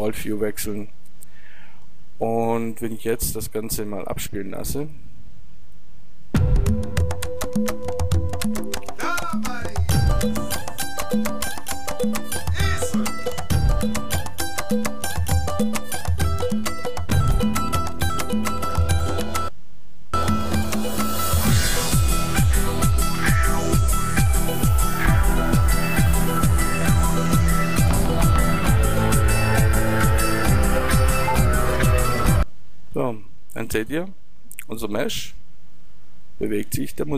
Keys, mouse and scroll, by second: 5.0-7.5 drag, 32.3-37.0 drag.